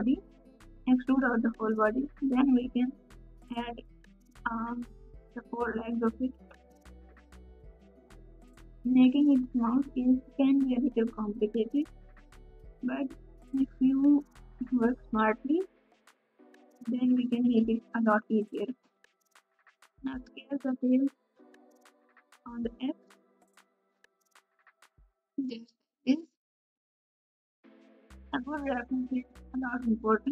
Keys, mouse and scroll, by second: 1.8 e, 3.1 s, 4.8 g, 7.6 s, 8.5 r, 11.5 KP_Subtract, 11.5 KP_8, 13.8 e, 15.2 ctrl+z, 18.1 KP_Add, 18.1 KP_2, 18.1 KP_3, 25.1 g, 29.9 ctrl+KP_6, 29.9 alt+z.